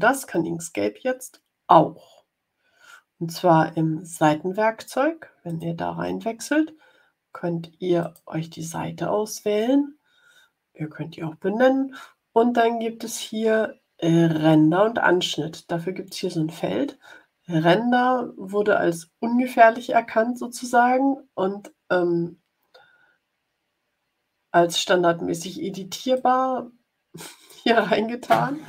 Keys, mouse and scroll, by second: 5.4 click, 7.9 click, 26.1-27.6 drag.